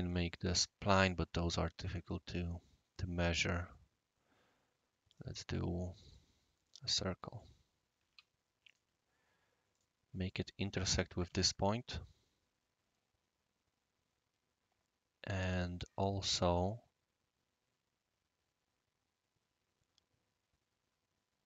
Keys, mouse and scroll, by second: 2.8 scroll up 1, 2.8 scroll down 1, 3.4 middle click, 4.4-5.1 scroll down 1, 5.1 click, 5.4 scroll down 1, 5.5 scroll up 1, 6.1-7.4 drag, 8.1 Escape, 8.6 click, 9.7 click, 10.3 click, 11.3 i, 12.5 scroll down 1, 12.7-13.8 scroll up 1.